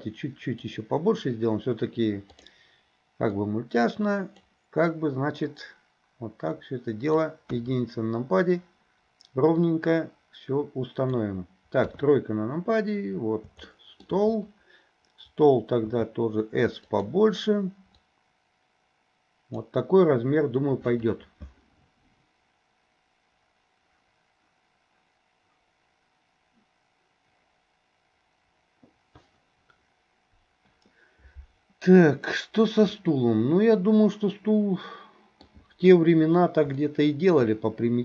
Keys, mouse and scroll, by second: 3.5-4.5 drag, 5.5-7.3 drag, 7.5 KP_1, 9.8-11.3 drag, 11.9 KP_3, 13.7-14.1 shift+middle drag, 13.7 shift+scroll up 1, 15.9 s, 18.2-19.6 drag, 32.4-35.5 middle drag, 35.5-36.8 scroll down 1, 36.8 scroll up 1, 37.0-37.4 shift+middle drag.